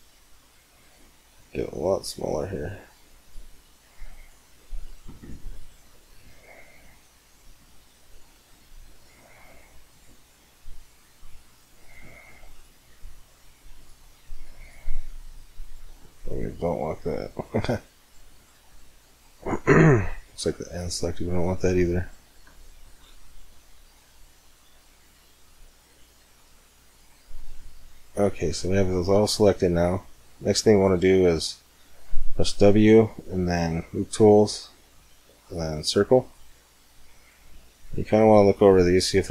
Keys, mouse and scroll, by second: 1.0 c, 5.3 right click, 5.4 middle click, 6.0 middle click, 6.0 right click, 6.2 middle click, 6.2 right click, 6.2 click, 6.4 click, 8.1 c, 15.8-17.5 middle drag, 16.8 c, 18.2-19.8 right drag, 18.5-20.2 middle drag, 19.1 click, 19.8 c, 20.6-22.4 right drag, 20.9-24.9 middle drag, 25.8-27.3 right drag, 26.1-28.7 middle drag, 27.3 click, 30.6-33.3 middle drag, 32.3 w, 37.1-38.9 middle drag.